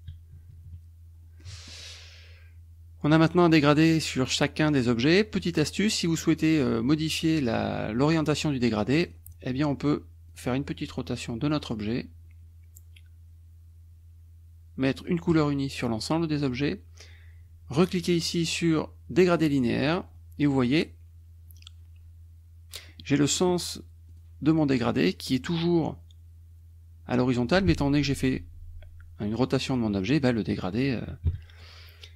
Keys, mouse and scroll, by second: 0.4 KP_Subtract, 1.5 click, 5.3-6.6 drag, 9.1 click, 10.3-12.0 drag, 15.4 click, 19.4 click, 22.9 click, 24.1 click, 29.7 click, 31.3 KP_Subtract.